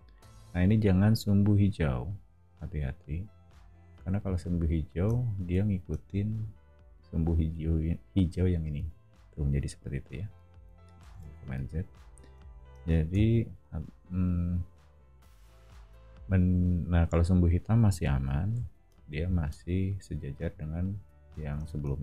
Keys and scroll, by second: 4.2 o, 11.0 super+z, 13.1 l, 18.5 o.